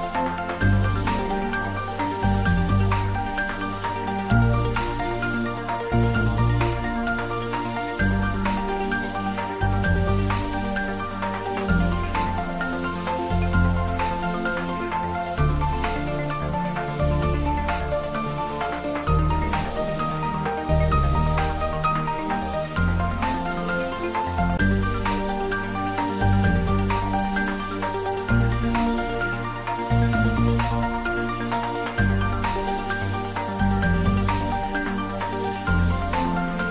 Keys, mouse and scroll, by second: 8.6 click, 9.3 Tab, 9.9-10.7 scroll down 1, 10.7-12.3 middle drag, 13.4 scroll up 1, 14.7 click, 19.8 click, 21.9 click, 27.2 click, 36.5 click.